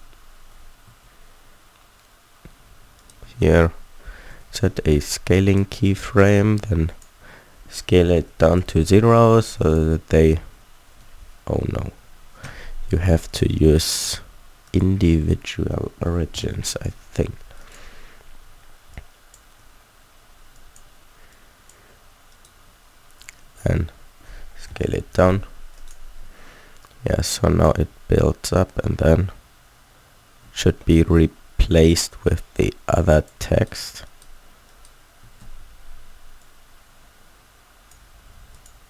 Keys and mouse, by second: 0.8 a, 3.2 a, 3.4 a, 4.3 i, 7.6 s, 11.5 ctrl+z, 11.9 ctrl+z, 15.9 s, 17.5-19.5 drag, 22.3-24.2 middle drag, 24.2 s, 26.8 middle click, 27.8 alt+a, 30.5 alt+a, 35.3 a, 35.4 a.